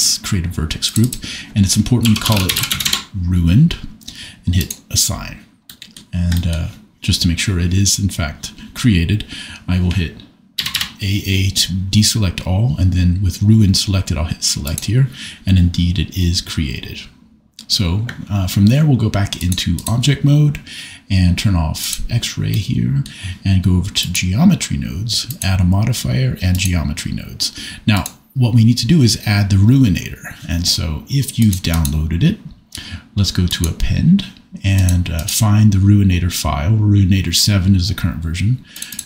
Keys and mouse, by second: 0.8 click, 1.2-2.9 drag, 10.5 a, 10.7 a, 19.5 click, 21.9 click, 22.5 middle click, 24.0 click, 25.4-26.6 drag, 27.9-31.4 drag, 31.9-33.7 drag.